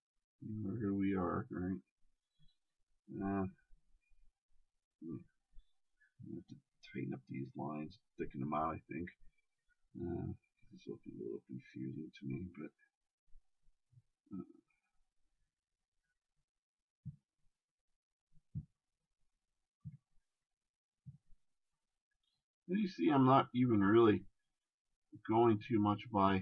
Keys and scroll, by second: 8.8 shift+space.